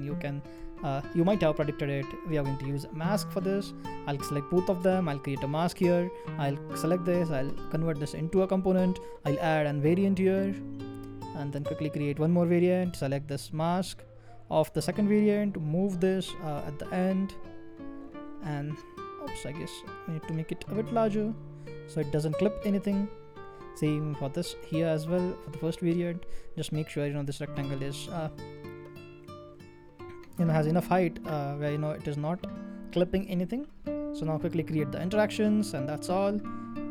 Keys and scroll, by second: 0.6 m.